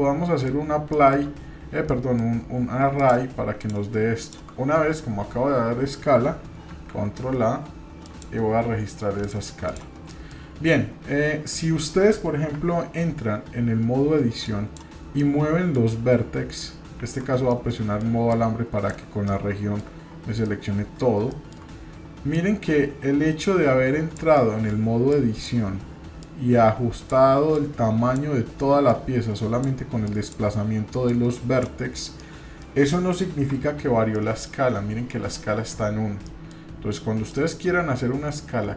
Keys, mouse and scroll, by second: 0.9 shift+middle click, 1.9 middle click, 3.6 shift+drag, 6.7 ctrl+a, 9.2 click, 9.6 click, 10.1 middle click, 10.7 scroll up 2, 11.5-12.2 scroll down 1, 12.5 Tab, 14.4 click, 15.2 middle click, 17.1 shift+z, 17.4 scroll down 1, 17.5 middle click, 18.3 click, 19.3 middle click, 20.0-20.3 scroll up 1, 20.4 middle click, 21.3 shift+middle click, 22.3-24.2 drag, 24.3 middle click, 25.1 click, 26.2 click, 27.5 click, 28.9 click, 30.0 click, 31.0 click, 31.9 scroll down 1, 32.2 middle click, 33.5 Tab, 34.0 scroll down 1, 34.1 middle click, 36.3 middle click, 36.9-37.3 scroll up 1, 37.3-38.0 middle drag.